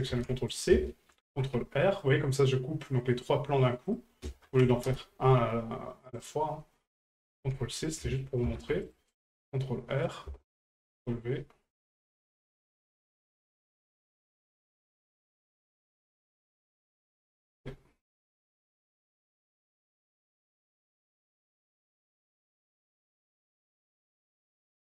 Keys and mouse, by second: 4.0 click, 6.2 right click, 7.0-8.0 drag, 10.1 ctrl+click, 11.9 right click, 12.8 right click, 13.6 ctrl+click, 16.5-17.6 drag, 18.7 right click, 19.6-20.6 ctrl+drag, 23.4-24.4 ctrl+drag.